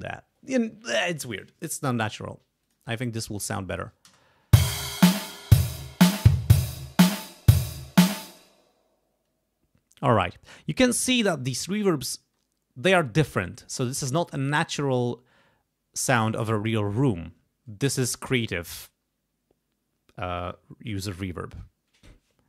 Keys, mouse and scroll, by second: 2.6 click, 3.7 click, 4.1 space, 8.1 space.